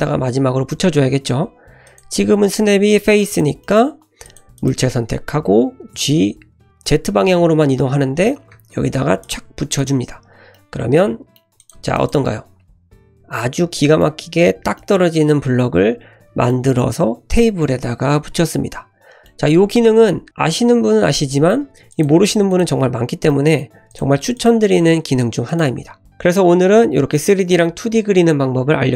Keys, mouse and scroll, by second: 1.8-3.4 drag, 3.6 middle click, 4.2 click, 4.5 click, 5.9 g, 9.8 click, 10.1-10.4 scroll up 1, 10.5-11.3 middle drag, 11.6 click, 11.9 shift+click, 12.7 click, 13.0 click, 13.7-14.1 middle drag, 14.7-16.5 middle drag, 16.9-19.2 middle drag, 19.3 scroll down 1, 20.3 click, 21.3 middle drag, 21.9 click, 22.5 click, 22.9-23.3 scroll up 2, 23.3-23.6 middle drag, 23.9 click, 24.3 click, 25.5 click.